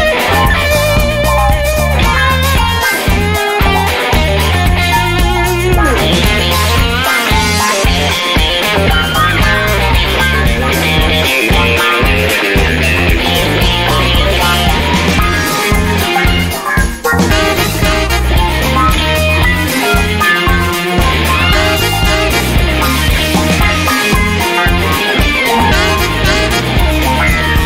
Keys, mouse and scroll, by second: 0.0-1.2 drag, 2.1-3.4 drag, 4.0 click, 5.8 click, 7.6 click, 9.2 click, 13.1 click, 13.7 click, 14.3 click, 16.4 click, 19.0 click, 20.4 click, 22.0-22.6 scroll up 1, 23.7-26.0 scroll down 2, 26.0-27.6 drag.